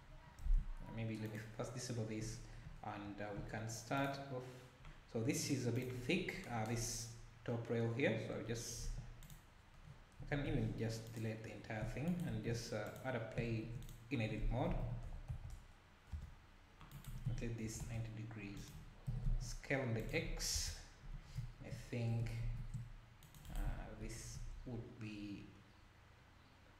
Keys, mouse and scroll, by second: 1.3 click, 5.9 click, 6.1 scroll up 4, 6.9-7.6 scroll down 2, 8.9 2, 9.3 click, 9.8 scroll down 1, 10.2 a, 12.2 shift+right click, 12.3 shift+a, 13.5 shift+a, 14.6 r, 17.1 r, 20.5 KP_Decimal, 22.4 ctrl+r.